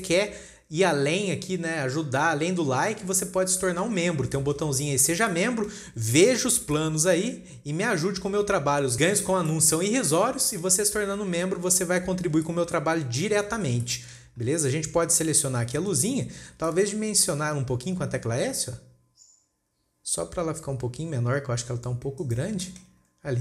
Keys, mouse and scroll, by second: 1.7-2.9 scroll down 3, 2.9-3.5 scroll up 4, 3.5-4.0 scroll down 3, 4.0-7.6 shift+middle drag, 10.1-12.4 shift+middle drag, 12.4 scroll up 2, 12.9-16.3 shift+middle drag, 16.3 click, 17.1-18.5 shift+middle drag, 18.5 s, 23.0 shift+middle click.